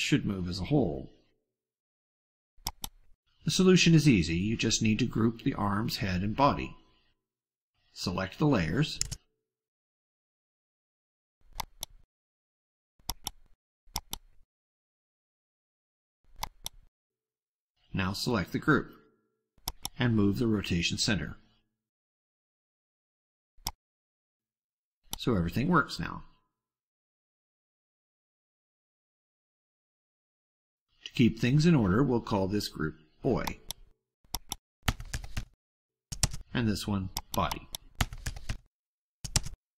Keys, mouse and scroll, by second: 2.5 click, 11.4 ctrl+click, 12.8 ctrl+click, 13.8 ctrl+click, 16.3 click, 19.5 click, 23.6-25.4 ctrl+drag, 26.3 click, 26.8-27.4 drag, 28.4-29.7 drag, 30.4-31.0 ctrl+scroll down 4, 33.4 click, 34.3-35.7 typing, 34.4 click, 36.4 Return, 37.1 click, 37.4 click, 37.4-39.1 typing, 39.3 Return.